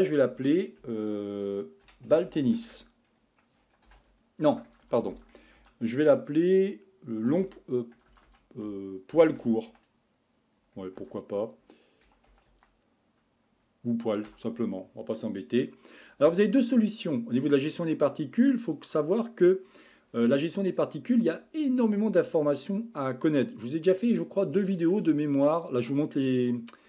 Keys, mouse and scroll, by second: 2.4 l, 4.7-5.6 typing, 8.1 BackSpace, 8.3 BackSpace, 11.0 BackSpace, 17.1-18.7 middle drag, 18.7-21.9 drag, 23.0-23.4 scroll down 1, 23.4-24.1 scroll up 1.